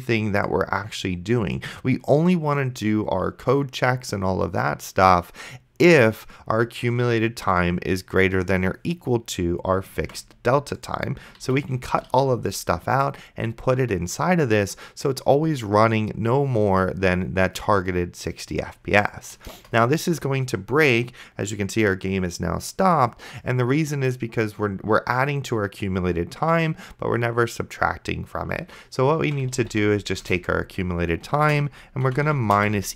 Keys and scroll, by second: 10.3 ctrl+x, 11.7 ctrl+v, 12.4 ctrl+s, 19.8 Return, 29.5 c, 29.8 u, 30.2 Return, 31.4-32.9 typing.